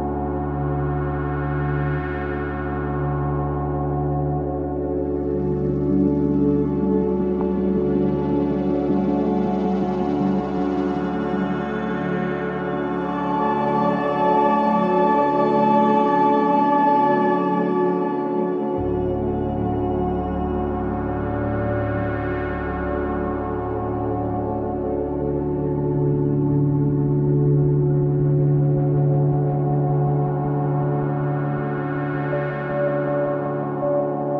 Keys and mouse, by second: 0.4-2.1 ctrl+alt+drag, 2.8-7.1 alt+drag, 7.8 click, 8.9 click, 15.7 click, 15.7 typing, 16.3 alt+click, 16.9 click, 18.2-18.6 typing, 23.3 shift+click, 26.1 click, 27.6 click, 29.1 click, 30.8 click, 31.7 click, 32.5 drag, 33.8 click.